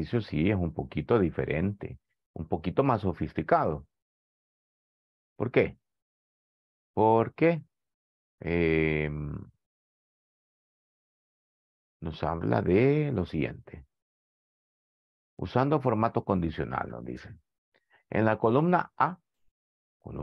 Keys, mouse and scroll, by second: 6.9 click, 8.4 click.